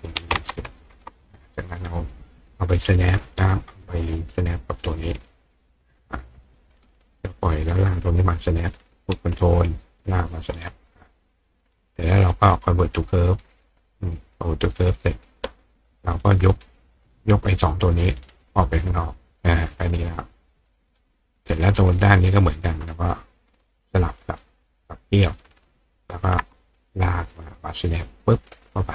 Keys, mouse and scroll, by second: 1.7 click, 2.1 click, 3.9-6.6 drag, 7.9-10.3 drag, 10.9 click, 11.5 click, 12.3 right click, 13.4 click, 14.5 click, 14.9 click, 16.3 click, 17.1-17.6 drag, 18.5-19.4 drag, 20.6 click, 20.9 right click, 22.1 click, 23.7 ctrl+click, 24.2-26.2 ctrl+right drag, 26.2-28.5 ctrl+drag.